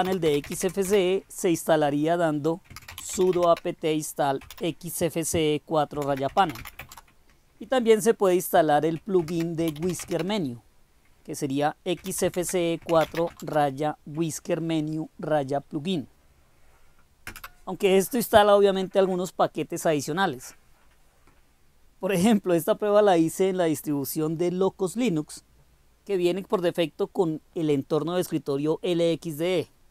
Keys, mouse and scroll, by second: 0.0-1.0 typing, 2.5-4.4 typing, 5.7-7.1 typing, 9.2-10.3 typing, 12.0-13.1 typing, 17.3 Return.